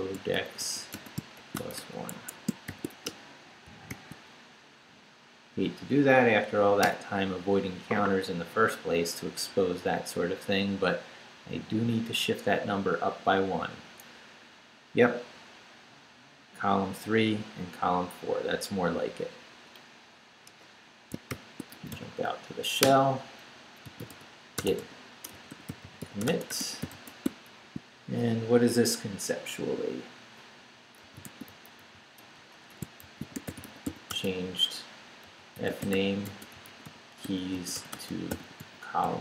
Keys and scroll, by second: 0.0-3.9 typing, 3.7 shift+Return, 4.5 shift+Up, 5.2 Up, 6.8 Return, 20.5 Return, 21.0-22.4 typing, 22.8 Return, 23.6-27.5 typing, 30.8-39.2 typing.